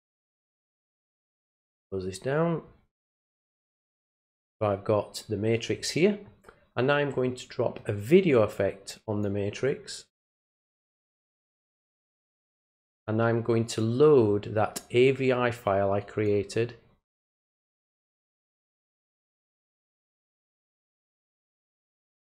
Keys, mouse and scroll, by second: 1.7 middle click, 2.7 scroll up 1, 3.5 click, 3.7 click, 7.8-9.2 drag, 10.9-12.1 drag, 13.6 click, 15.7 click, 19.1 click, 22.2 click.